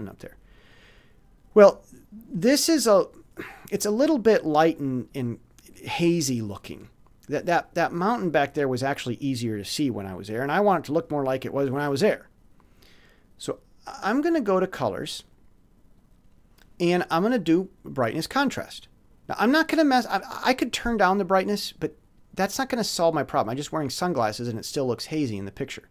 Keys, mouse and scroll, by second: 15.2 click, 18.1 click, 20.6 click.